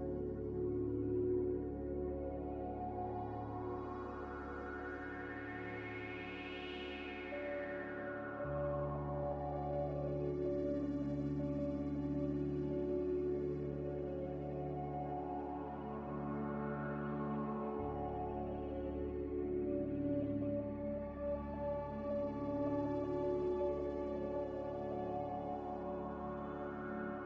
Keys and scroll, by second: 0.8 z, 3.5-4.3 typing, 8.5 Delete, 10.2 c, 12.3 ctrl+z, 12.4 ctrl+z, 12.8 ctrl+z, 13.3 ctrl+z, 13.4 ctrl+z, 21.2 z, 24.0 a.